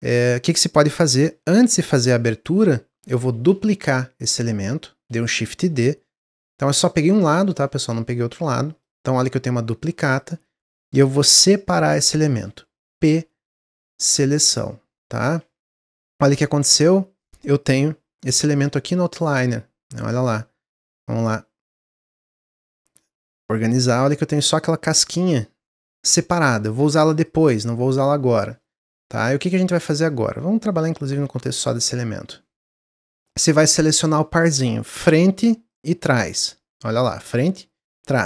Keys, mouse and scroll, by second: 3.3 shift+d, 7.5-9.2 middle drag, 9.2-10.3 drag, 10.3 ctrl+z, 11.8 p, 15.8 scroll down 3, 17.2 click, 17.4 click, 17.6 click, 18.5 click, 19.0 click, 19.9 click, 22.4 click, 23.2 click, 23.8 click, 24.4-27.1 middle drag, 27.1 click, 27.8 click, 28.7-30.7 middle drag, 30.7 click, 31.1-33.0 middle drag, 33.0 click, 35.0 middle click, 35.7 shift+click, 36.7-38.2 middle drag.